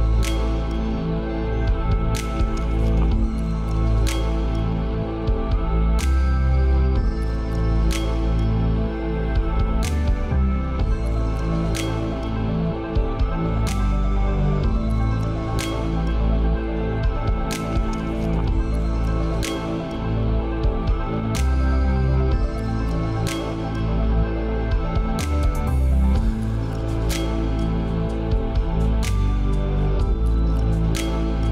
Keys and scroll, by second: 0.2 ctrl+space, 6.8 ctrl+z, 8.0 ctrl+space, 10.1 ctrl+z, 18.6 ctrl+t, 29.8 ctrl+c.